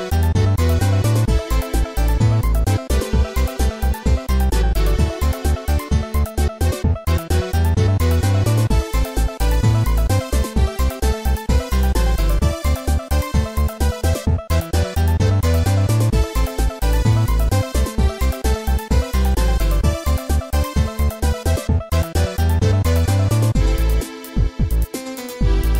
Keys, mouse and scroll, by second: 1.0 click, 1.8 click, 2.3 s, 3.6 click, 3.9 ctrl+z, 4.5 click, 4.9 click, 6.0 typing, 6.3-7.0 scroll up 2, 12.9 click, 13.1 click, 13.2 ctrl+z, 14.5-15.2 typing, 17.1 scroll up 2, 18.1-18.7 scroll up 2, 21.6 typing, 25.1 scroll down 2.